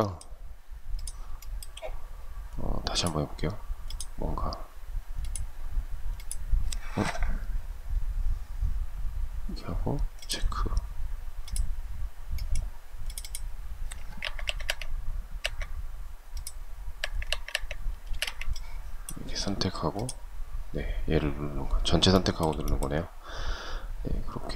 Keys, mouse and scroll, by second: 0.6 shift+middle click, 13.4 Escape, 16.2 Escape, 17.3 space, 17.4 Escape, 21.4 shift+middle click.